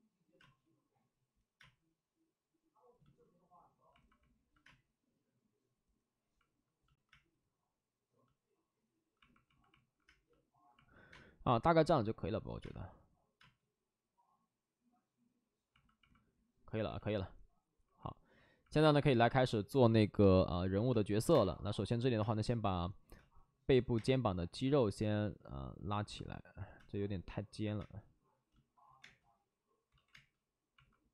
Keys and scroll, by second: 0.3 space, 1.5 space, 4.6 space, 7.1 space, 10.0 space, 11.1 space, 12.6 space, 13.3 space, 20.9-23.9 typing, 23.7 ctrl+z, 25.0 ctrl+z, 26.7 ctrl+z, 26.7 space, 27.6 ctrl+z, 27.7 space, 28.8 ctrl+z, 29.0 space, 29.8 ctrl+z, 30.1 space.